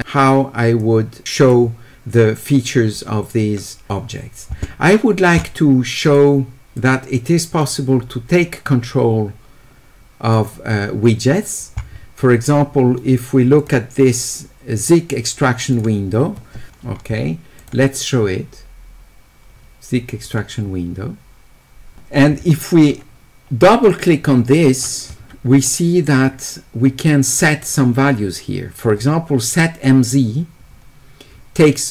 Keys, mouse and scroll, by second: 0.8 click, 6.1 click, 6.7 click, 8.4-10.3 drag, 13.6 click, 15.6 click, 15.7 click, 17.6 click, 20.2 click, 23.8 ctrl+click, 24.0 ctrl+click, 25.6 middle click, 25.6-26.2 scroll up 2, 26.3 middle click, 26.3-27.1 scroll up 2, 27.4 middle click, 27.4 scroll up 2, 28.9 middle click.